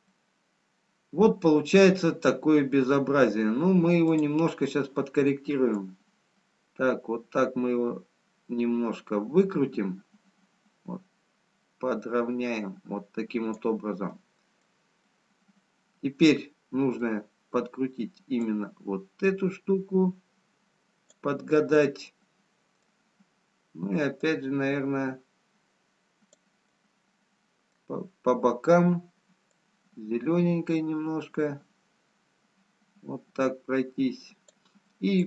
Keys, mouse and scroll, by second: 2.6 middle click, 4.6 click, 6.5 click, 14.4 middle click, 16.6 middle click, 22.1 middle click, 25.4 click, 26.8 middle click, 30.5 click.